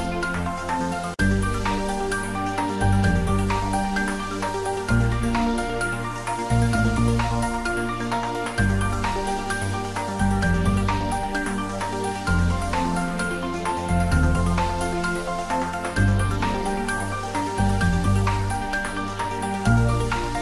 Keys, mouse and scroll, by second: 0.0 z, 1.9 click, 4.5 click, 5.8 shift+z, 7.2 click, 8.8 click, 10.4 shift+click, 13.5-15.9 middle drag, 15.9 click, 17.1 shift+click, 18.4 shift+d, 19.0 x.